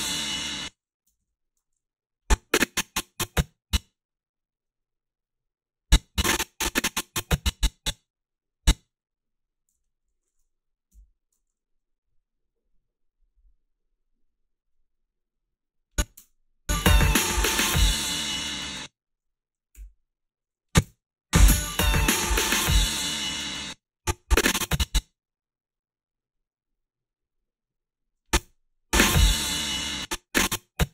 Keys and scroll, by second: 0.4 space, 1.1 space, 1.2 =, 9.7 g, 10.9 Delete, 16.2 space, 18.6 space, 20.8 space, 23.4 space, 28.4 space, 29.8 space.